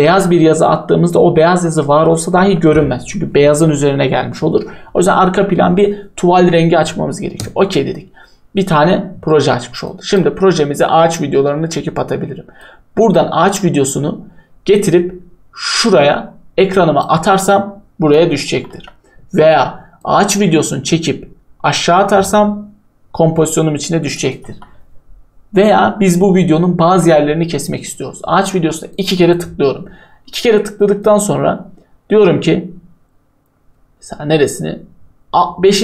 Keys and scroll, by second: 18.7 Delete, 24.5 Delete.